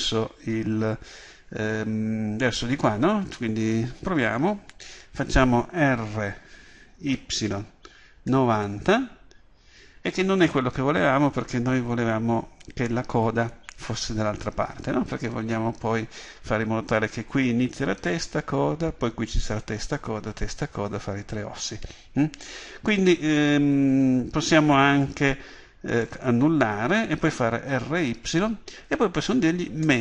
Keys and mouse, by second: 6.2 r, 26.0-30.0 drag, 27.7 r.